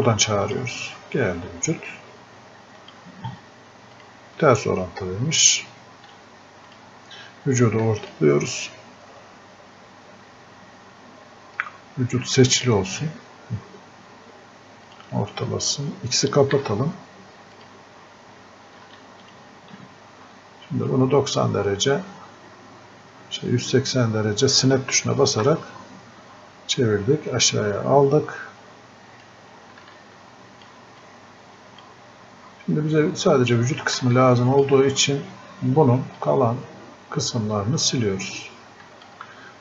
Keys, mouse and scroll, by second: 0.5 click, 6.7 click, 12.5 alt+click, 16.6 x, 17.6 click, 20.9-39.6 drag, 38.9-39.6 shift+drag.